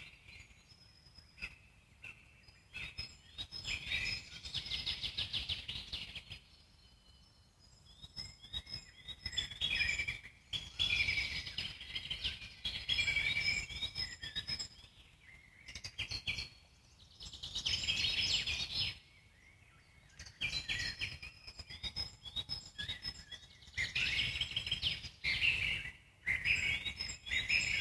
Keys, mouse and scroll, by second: 1.5-1.9 scroll down 1, 1.9-4.1 alt+middle drag, 4.1-8.8 drag, 8.8-10.8 alt+middle drag, 10.8-11.3 scroll down 1, 11.3-12.8 alt+middle drag, 12.8-14.1 scroll up 1, 14.1 f, 15.0-20.3 drag, 20.3-22.5 alt+middle drag, 22.5 scroll down 1, 22.8-24.3 alt+middle drag, 24.3-25.2 scroll up 5, 26.2-27.8 drag.